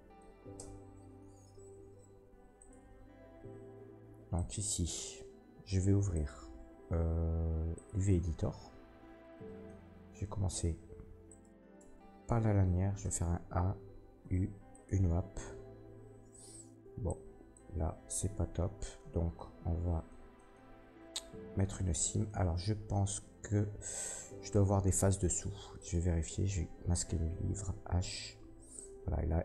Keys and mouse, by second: 0.5 Tab, 11.2 middle click, 11.2 right click, 11.7 Tab, 12.9 a, 14.2 u, 18.4 ctrl+z, 25.3 Tab, 25.7 middle click, 25.7 right click, 27.6 h.